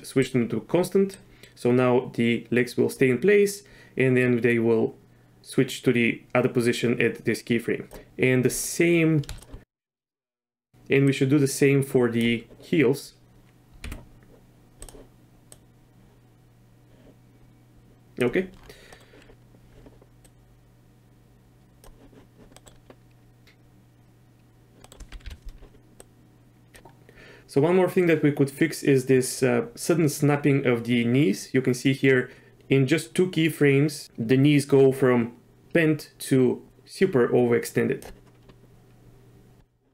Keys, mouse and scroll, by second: 1.1-7.9 drag, 11.1-12.2 drag, 15.5-18.2 drag, 18.9 middle click, 20.2-21.8 drag, 22.5 middle click, 24.8 middle click, 25.2 KP_3, 26.0 click, 29.4 click.